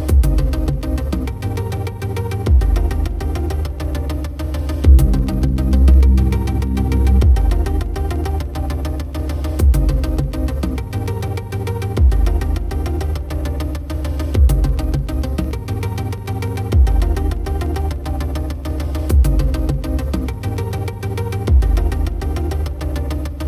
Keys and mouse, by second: 0.3 right click, 1.1 right click, 1.5 right click, 2.6 right click, 3.0 right click, 3.7 right click, 4.0 right click, 4.4 right click, 5.0 right click, 5.7 right click, 6.1 right click, 6.8 right click, 7.1 right click, 7.5 right click, 8.0 right click, 8.2 right click, 8.5 right click, 8.9 right click, 9.1 right click, 9.9 right click, 11.1 right click, 11.3 right click, 12.3 right click, 13.0 right click, 13.5 right click, 14.0 right click, 14.4 right click, 15.8 right click, 16.2 right click, 16.5 right click, 17.1 right click, 17.9 right click, 18.2 right click, 18.4 right click, 19.0 right click, 19.4 right click, 21.2 right click, 21.6 right click, 22.4 right click, 23.2 right click.